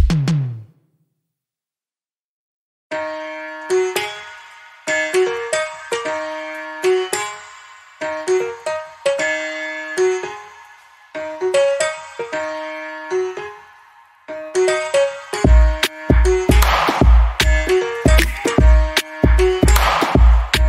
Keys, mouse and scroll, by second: 1.5 right click, 2.3 click, 4.3 Escape, 5.0 alt+middle click, 5.7 alt+click, 9.7 Escape, 10.6 alt+click, 12.6 right click, 13.0 click, 19.6 alt+middle click, 20.1-20.6 scroll up 1.